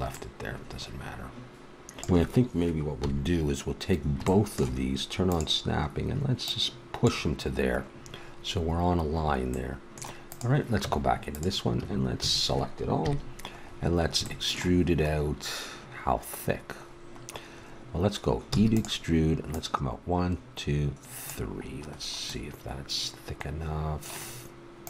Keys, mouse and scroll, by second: 2.1 middle click, 3.0 KP_3, 3.6 click, 5.3-7.1 drag, 8.2 middle click, 9.5 middle click, 10.3-12.1 drag, 10.8 Tab, 11.7 a, 12.2 a, 13.0 KP_3, 15.9-19.5 middle drag, 18.5 e, 24.3 middle click.